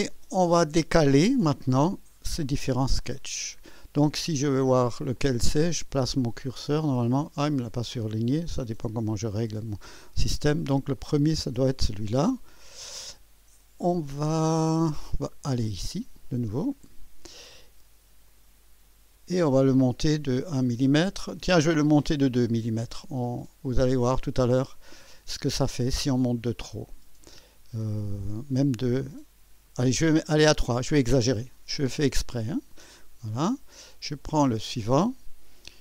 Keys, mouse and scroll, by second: 3.1 click, 5.1 click, 10.9 click, 16.1 click, 16.8 click, 18.2 click, 18.9 scroll up 2, 22.3 scroll up 2, 29.4 scroll up 2, 31.2 click, 32.3 click, 34.0 click.